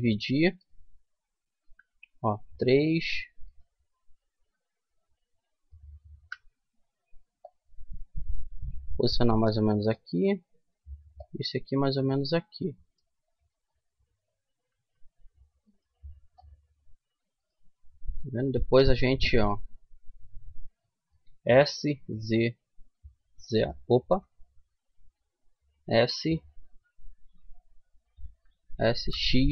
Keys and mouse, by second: 0.2-1.3 middle drag, 1.3 right click, 1.3 KP_3, 3.2 right click, 3.8 middle click, 4.4 click, 4.6 middle click, 4.7 click, 4.9 middle click, 5.8 KP_3, 7.1-8.9 drag, 10.3 right click, 10.8-12.1 middle drag, 12.1 click, 14.2 a, 15.3-17.7 right drag, 17.7 click, 18.1 middle click, 21.1 s, 24.7 ctrl+z, 27.9 s.